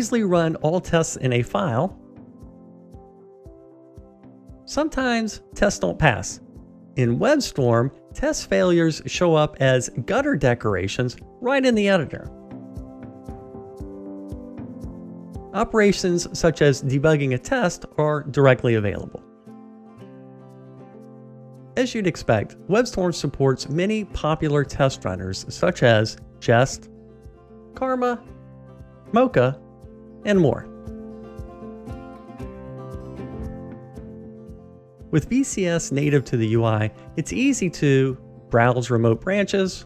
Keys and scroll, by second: 8.7 super+r.